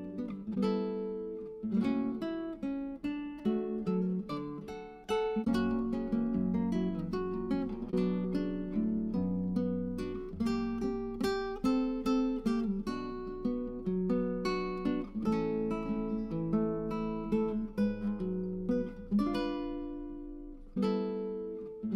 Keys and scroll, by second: 13.6 Tab.